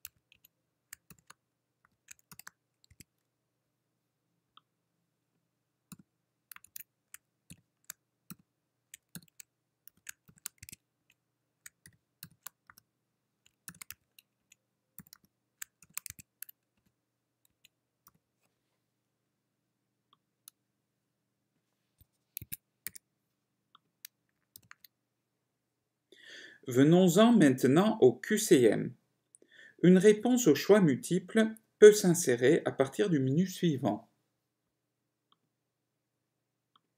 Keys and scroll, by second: 2.3-3.1 typing, 7.6-8.6 typing, 10.1-18.3 typing, 11.3 Right, 16.9 Return, 17.6 Right, 22.5 Escape.